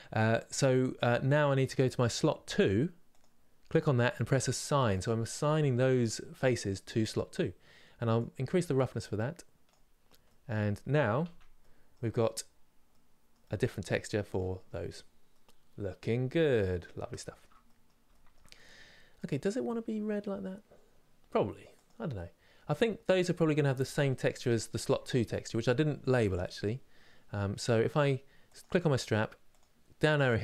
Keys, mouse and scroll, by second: 1.5-10.0 drag, 10.0 middle click, 10.9 Tab, 11.3 middle click, 11.7 scroll down 4, 13.1-14.2 middle drag, 14.2 scroll up 2, 15.1-21.5 middle drag, 21.5 click, 28.2 click.